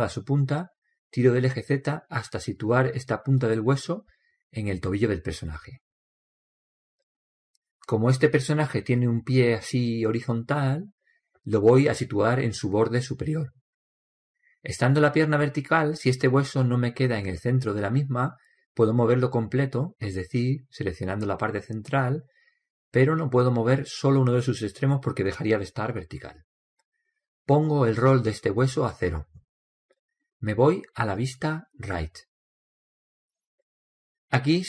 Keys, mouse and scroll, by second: 0.5 scroll up 1, 1.6-3.4 drag, 4.1-6.0 middle drag, 6.0-7.8 drag, 16.9-18.6 right drag, 17.6 middle click, 18.6 scroll up 1, 18.8 middle click, 18.9-20.8 drag, 22.2-24.1 right drag, 23.1-24.9 drag, 29.0-30.8 drag, 32.8 KP_3.